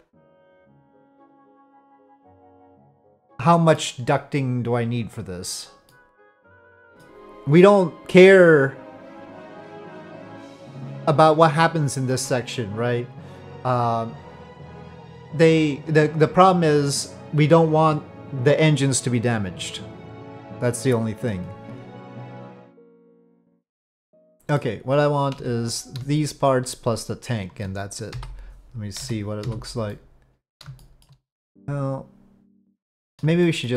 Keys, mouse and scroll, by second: 0.3-3.9 middle drag, 5.9-7.1 middle drag, 12.1 middle click, 22.3 z, 22.4-24.6 middle drag, 25.4 Tab, 26.2 shift+click, 28.1 KP_Divide, 29.0 z, 29.9-30.5 middle drag, 30.8 shift+middle drag, 31.5-33.2 middle drag, 33.4 shift+middle drag.